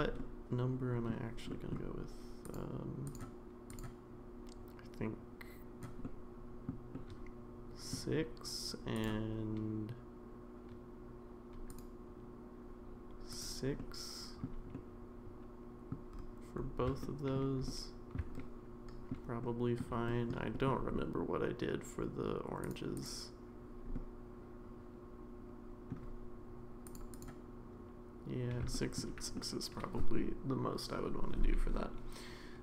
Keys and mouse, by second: 0.2-1.1 middle drag, 1.5 middle drag, 2.4 click, 6.0-6.7 middle drag, 6.9-7.9 middle drag, 8.9 click, 11.7 click, 13.8 middle click, 14.7-15.9 middle drag, 17.0 shift+middle click, 17.7 middle click, 18.4 shift+middle click, 19.4 shift+middle click, 20.1 shift+middle click, 20.5 middle click, 22.6 click, 22.9 click, 23.9-25.9 middle drag, 27.1 click, 28.7 shift+middle drag, 29.3-30.2 middle drag.